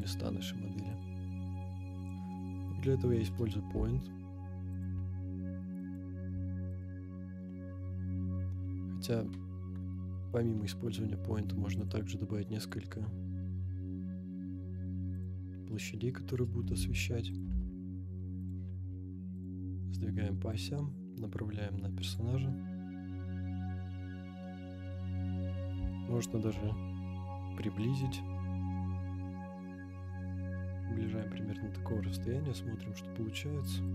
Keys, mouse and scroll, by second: 2.5 scroll down 2, 2.8-3.2 middle drag, 3.7 g, 3.7 z, 4.8 click, 4.9 g, 5.0 x, 5.9 click, 6.3 g, 6.3 y, 6.8-8.8 drag, 10.1 Delete, 11.8 click, 12.7-15.4 drag, 15.6 scroll down 1, 16.6 g, 16.7 z, 17.4 click, 17.5 g, 17.5 x, 18.5 click, 18.7 g, 18.7 y, 19.5 click, 19.7-20.0 middle drag, 20.5 click, 24.6 KP_7, 25.5-25.8 scroll down 2, 25.9 shift+middle drag, 26.5 g, 28.1 click, 29.6 g, 31.2 click, 32.0 KP_0.